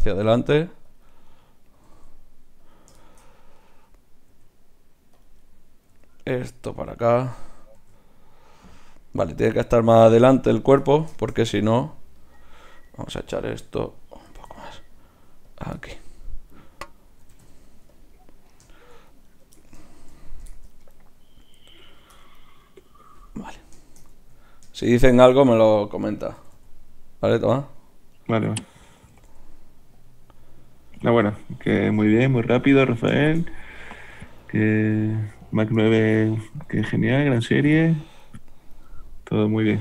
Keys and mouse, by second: 0.2 r, 1.4 middle click, 1.8 r, 3.6 right click, 4.3 g, 5.9 g, 7.8 g, 9.2 g, 10.5 click, 14.4 g, 17.3 g, 19.3-23.9 right drag, 26.3 r, 29.2 r, 31.7 g, 36.4 r.